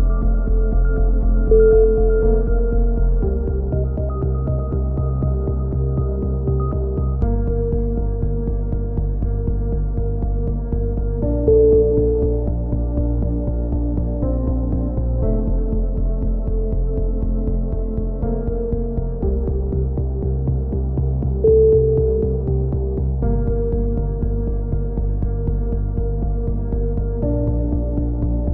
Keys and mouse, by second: 0.5 a, 1.1 a, 1.7 right click, 2.0 click, 2.6 c, 3.6-4.6 drag, 5.7 g, 8.9 click, 9.4-11.1 middle drag, 10.1 g, 14.0 click, 14.5 a, 14.9-16.0 middle drag, 16.0 z, 16.3 Tab, 16.7 click, 16.9 middle click, 17.8-18.9 drag, 19.5 KP_3, 19.9 middle click, 20.2-21.2 drag, 21.4 Tab, 24.3 KP_3, 25.6 z, 26.4 click, 27.3-28.5 middle drag.